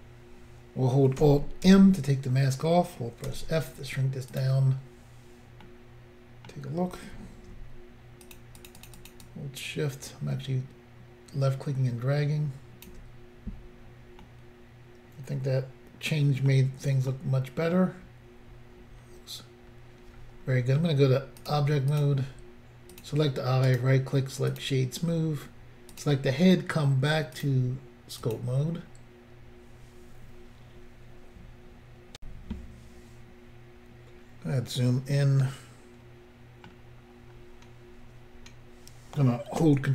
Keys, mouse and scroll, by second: 1.7 alt+m, 3.3 f, 4.3 click, 5.7 middle click, 8.3 shift+click, 8.4 shift+click, 8.6 shift+click, 8.7 shift+double click, 8.8 shift+click, 8.9 shift+click, 9.0 shift+click, 9.1 shift+double click, 9.3 shift+click, 14.3 middle click, 17.1 middle click, 17.8-19.0 scroll down 2, 19.0 scroll down 1, 19.2 scroll up 1, 19.6 scroll down 1, 21.4 click, 21.5 click, 21.9 click, 22.0 click, 22.9 click, 23.0 click, 23.7 right click, 24.5 click, 25.9 click, 26.0 click, 27.3 click, 27.4 click, 28.2 click, 28.3 click, 32.1 Pause, 34.2-35.4 scroll up 3, 35.5 middle click, 37.4-37.9 scroll down 1.